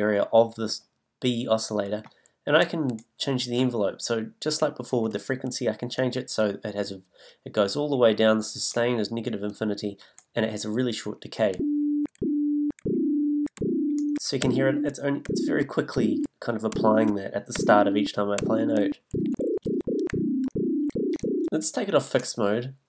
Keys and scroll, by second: 11.5 s, 19.6 e, 20.9 d.